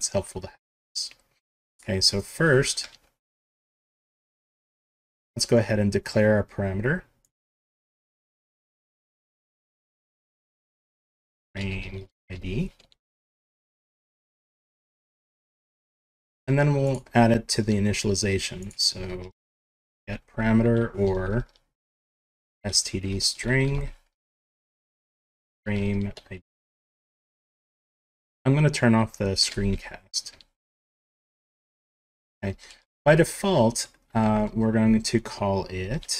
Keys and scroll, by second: 7.9 Home, 8.4 shift+Down, 8.9 ctrl+c, 9.6 ctrl+v, 9.8 Up, 10.0 End, 10.4 ctrl+Left, 10.9 ctrl+shift+Left, 14.0 ctrl+s, 19.3 Home, 19.6 shift+Down, 20.0 ctrl+c, 21.0 ctrl+v, 21.0 Up, 21.9 ctrl+shift+Left, 24.1 Right, 24.9 ctrl+shift+Right, 26.5 End, 29.5 ctrl+shift+p.